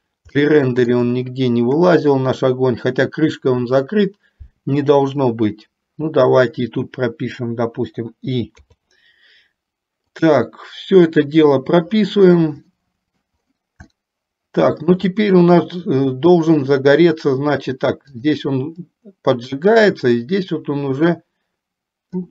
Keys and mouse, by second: 0.6 shift+middle click, 11.2 click, 12.9 middle click, 14.1-15.1 shift+middle drag, 18.4 click, 19.2-22.3 drag.